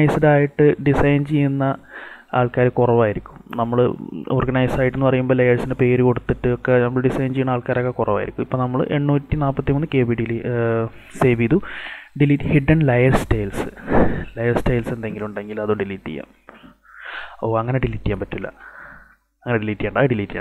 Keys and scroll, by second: 18.5 ctrl+alt+z.